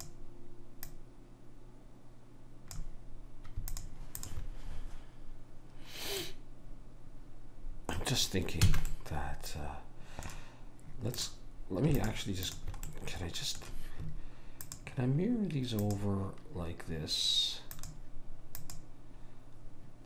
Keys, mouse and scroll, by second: 0.1 click, 3.8 click, 6.3-8.7 middle drag, 8.7 a, 11.3-14.4 drag, 13.0-14.3 right drag, 17.8 click.